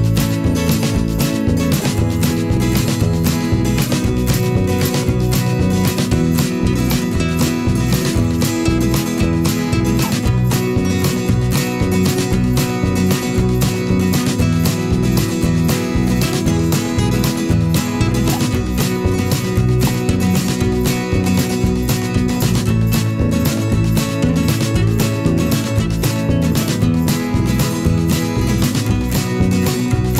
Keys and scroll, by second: 6.5 ctrl+alt+z.